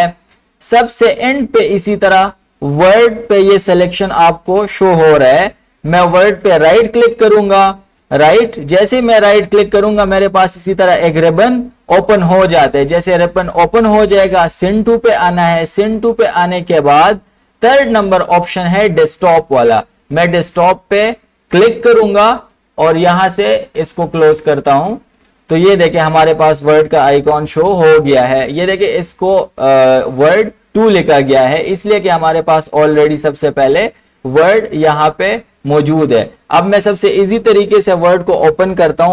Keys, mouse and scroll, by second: 6.5 click, 6.8 right click, 8.5 click, 21.6 click, 24.6 click, 24.8 click, 39.0 click.